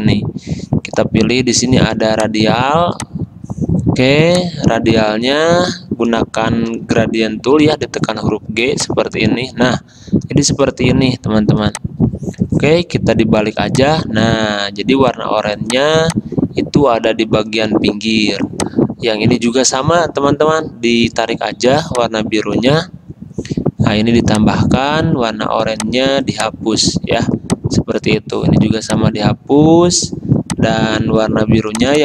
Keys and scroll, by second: 6.9 g.